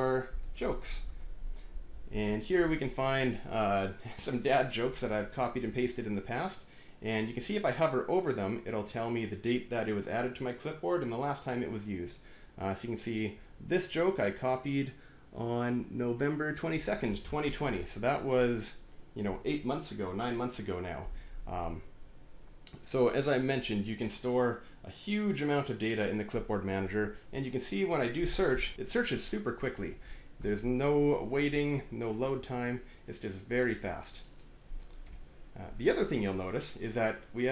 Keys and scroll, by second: 0.1-1.2 typing, 28.3-29.2 typing, 34.9 BackSpace.